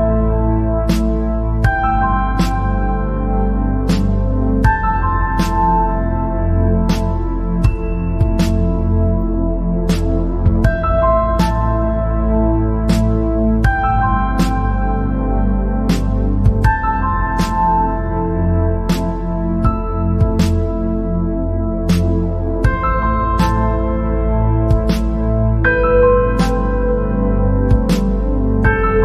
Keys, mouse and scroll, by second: 0.3-0.7 scroll up 3, 0.7-1.1 scroll down 3, 2.6 p, 5.4 click, 6.5 scroll up 2, 7.0 click, 7.4 scroll down 2, 17.8-19.4 drag, 19.5-25.7 drag, 25.7 typing.